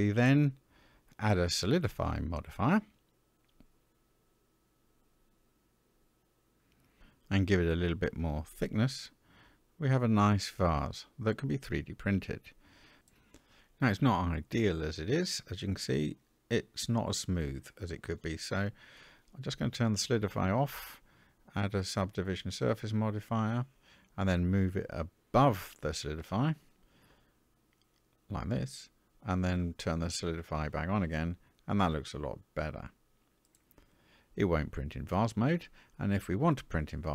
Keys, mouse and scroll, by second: 3.8-6.2 drag, 7.4 middle drag, 8.8-10.7 drag, 11.0-13.0 middle drag, 13.1-14.1 scroll up 1, 14.1-16.2 scroll up 1, 18.6 click, 19.5-22.1 drag, 27.5-28.7 drag, 30.1 click, 31.1-34.7 middle drag, 36.8 middle click, 36.8-37.1 scroll down 2.